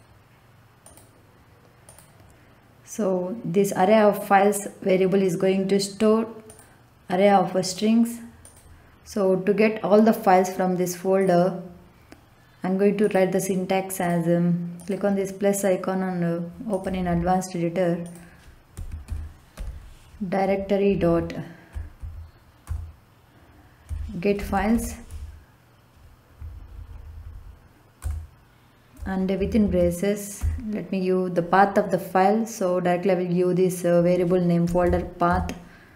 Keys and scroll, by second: 18.7 d, 19.0 i, 19.5 r, 20.8 Down, 22.6 Return, 24.1-25.2 typing, 26.3 Down, 27.9 Return, 29.1-30.1 typing, 30.3 Left, 34.4-35.9 typing.